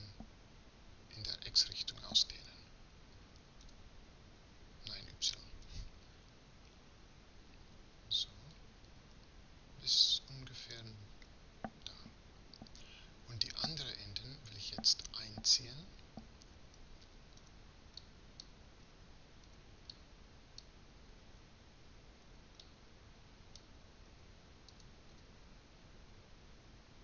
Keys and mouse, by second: 3.7 s, 17.4 b, 18.9 a, 19.5 b, 22.3 b, 24.7 s.